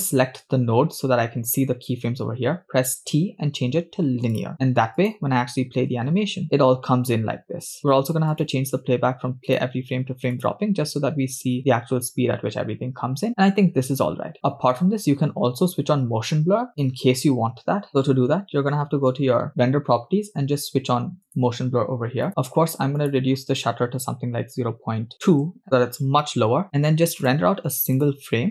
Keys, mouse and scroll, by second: 0.0 i, 0.0 click, 2.6 scroll down 1, 3.0 t, 5.5-5.9 drag, 6.5 space, 8.3 space, 8.4 click, 11.6 space, 15.5 space, 16.8 scroll down 8, 17.1 scroll down 2, 21.4 click, 22.2 click, 23.0-25.5 drag, 27.2-28.5 drag.